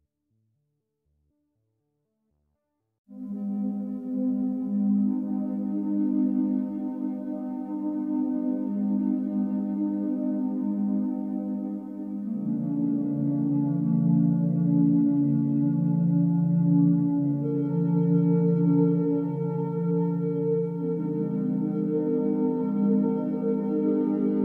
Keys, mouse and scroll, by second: 0.4-0.9 scroll up 4, 0.9 click, 1.3 click, 1.7 alt+middle click, 2.1 Tab, 2.1-3.0 scroll up 6, 3.0 click, 3.4 l, 3.9 g, 4.4 Tab, 4.5-5.2 scroll down 8, 5.2 b, 5.6 o, 23.2 click.